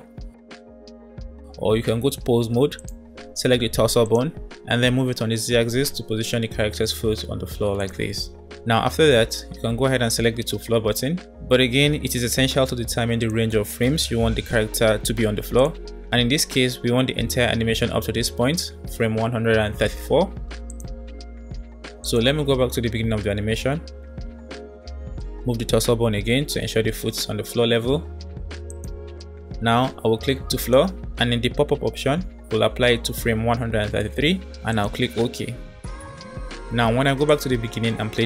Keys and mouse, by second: 2.4 Tab, 5.5 g, 12.5-13.6 drag, 15.3-18.3 drag, 20.6-20.9 drag, 22.2 click, 23.9 middle drag, 26.1 g, 30.7-35.5 drag, 37.3 click.